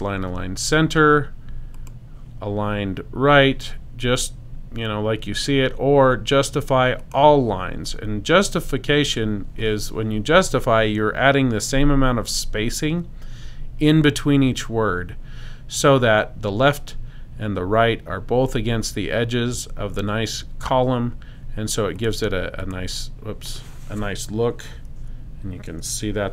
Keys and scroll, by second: 25.0 Escape, 25.8 BackSpace.